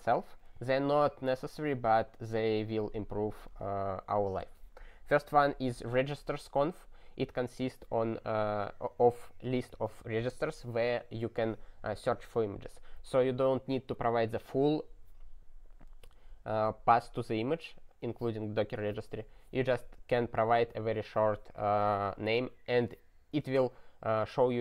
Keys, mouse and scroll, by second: 4.4 click.